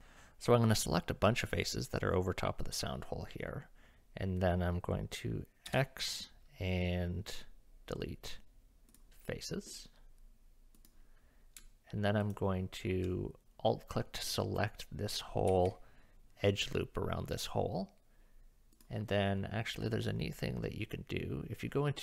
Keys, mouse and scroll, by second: 5.7 x, 10.8 click, 12.2 alt+click, 14.2 middle click, 15.5 KP_1, 18.7 click.